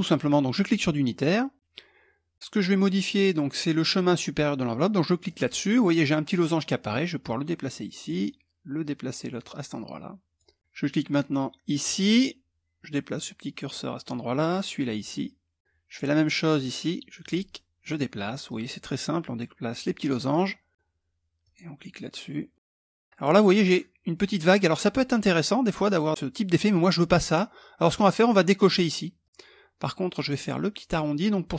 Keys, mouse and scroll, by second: 0.1 click, 4.8 click, 6.8-8.0 drag, 9.0-10.5 drag, 11.4 click, 12.7 click, 14.0-15.6 drag, 15.7-16.3 scroll up 1, 16.8 click, 18.0-19.7 drag, 21.0 click, 22.2 click, 28.8 click.